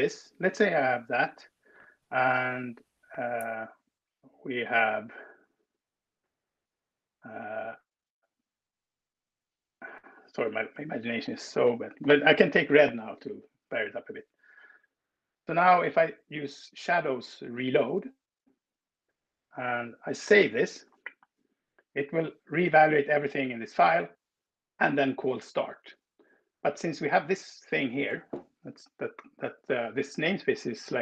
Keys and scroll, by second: 10.3 ctrl+w, 11.1-12.7 typing, 12.7 Escape, 20.0 super+s.